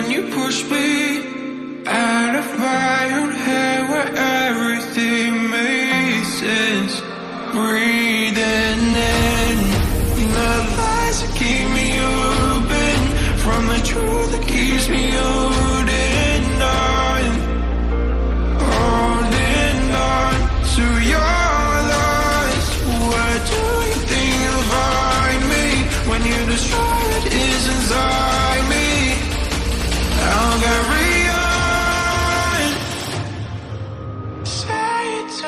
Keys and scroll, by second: 19.3 ctrl+j, 27.8-32.0 typing.